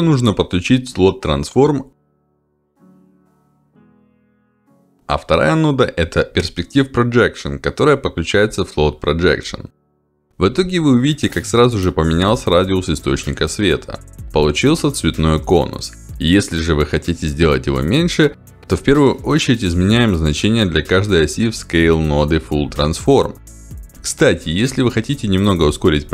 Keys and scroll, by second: 2.1 ctrl+alt+d, 5.2 p, 5.6 e, 5.8 r, 6.0 s.